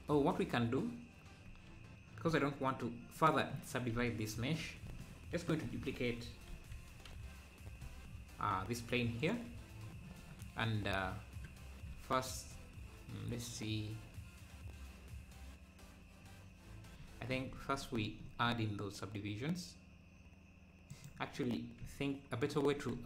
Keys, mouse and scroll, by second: 3.9 scroll down 1, 5.6 shift+d, 10.7-11.1 scroll down 1, 17.4 ctrl+r, 22.7 Tab.